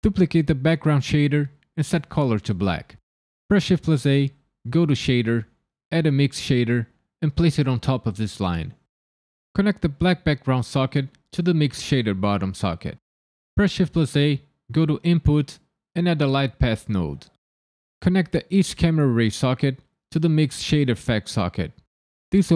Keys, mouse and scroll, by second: 0.0 click, 0.8 click, 3.8 shift+a, 8.3 click, 8.7 click, 9.4 click, 10.6 click, 13.8 shift+a, 18.3 click, 19.3 click.